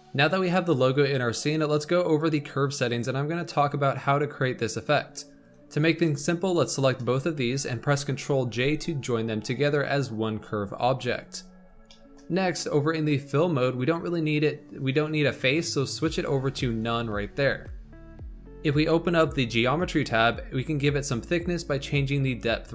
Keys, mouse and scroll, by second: 0.0-2.8 shift+middle drag, 2.8 click, 5.4 click, 6.5 shift+click, 8.5 ctrl+j, 11.8-12.3 shift+middle drag, 12.3-12.7 scroll up 2, 13.7-20.1 drag, 20.1 scroll down 2, 20.1-20.6 middle drag, 20.6 middle click.